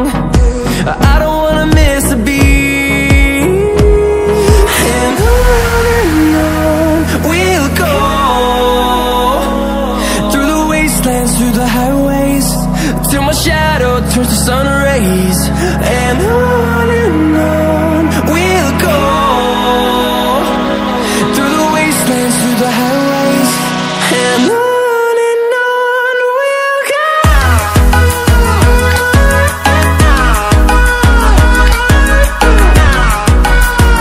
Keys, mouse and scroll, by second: 5.4-5.9 ctrl+alt+scroll down 2, 5.9-11.0 drag, 11.0 ctrl+alt+scroll up 1, 12.6-14.0 alt+shift+drag, 14.0-14.6 typing, 14.2 click, 15.7-19.9 drag, 22.6 ctrl+alt+scroll down 1, 23.6 click, 24.0 ctrl+alt+scroll down 1, 25.5-28.2 drag, 28.2 ctrl+alt+scroll up 1, 30.1-31.9 alt+shift+drag, 31.9 ctrl+alt+scroll up 1, 33.0-34.0 drag.